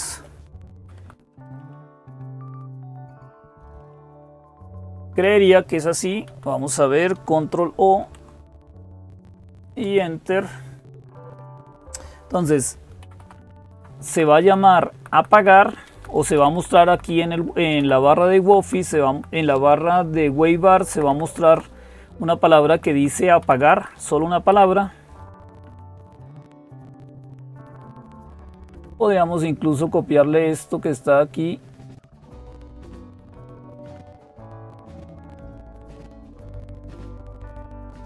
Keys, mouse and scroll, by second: 0.5 Right, 0.8 Right, 1.1 Down, 1.8 Up, 2.3 Down, 4.7 Down, 5.0 Up, 5.0 ", 5.3 Up, 5.5 Up, 6.1 Down, 7.8 ctrl+o, 9.5 Return, 11.8 Up, 12.1 Up, 12.8 Left, 13.0 Left, 13.2 Left, 13.5 Left, 13.9 Right, 14.1 Right, 14.3 Right, 14.4 Right, 14.7 Right, 15.1 Right, 15.3 Right, 16.2 Left, 16.2 Right, 16.4 Left, 16.5 Left, 16.7 Left, 16.9 Left, 18.2 Left, 18.2 Right, 18.4 Right, 18.6 Right, 18.9 Right, 20.7 Left, 20.9 Left, 21.1 Left, 21.3 Left, 22.2 Right, 22.4 Right, 22.5 Right, 22.7 Right, 23.2 Left, 23.4 Left, 23.6 Left, 23.7 Left, 24.3 Left, 30.3-38.0 drag.